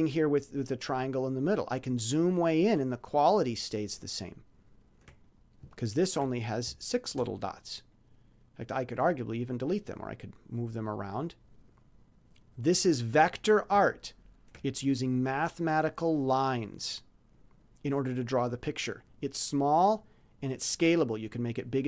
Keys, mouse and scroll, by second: 0.1-2.6 ctrl+scroll up 12, 3.0 ctrl+scroll up 2, 3.5-4.8 ctrl+scroll down 8, 5.7 ctrl+scroll down 3, 6.8-7.1 shift+scroll up 3, 7.9 click, 9.4 click, 12.5 click, 13.0-13.3 scroll up 2, 14.1 ctrl+scroll down 2, 15.7 click.